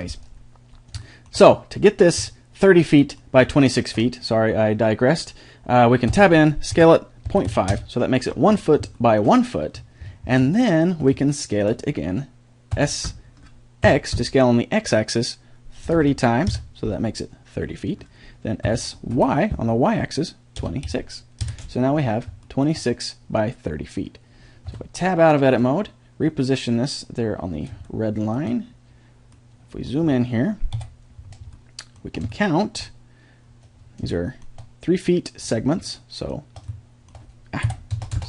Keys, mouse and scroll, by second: 2.6-5.5 middle drag, 6.1 Tab, 6.7 s, 9.0-13.8 middle drag, 12.7 s, 18.6 s, 22.2 middle click, 24.7 Tab, 25.7-27.4 drag, 30.7 KP_7, 36.7 middle click, 37.6 KP_7.